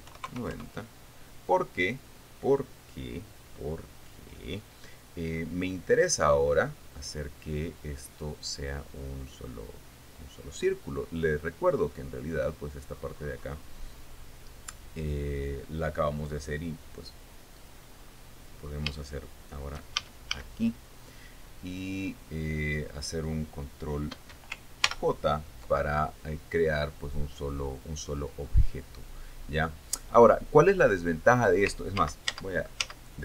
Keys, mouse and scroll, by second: 0.3 y, 0.6 KP_9, 0.8 KP_0, 1.1 KP_Enter, 20.6 shift+a, 22.2-22.8 scroll up 2, 23.0-23.4 scroll down 2, 25.4 ctrl+j, 32.6 ctrl+z.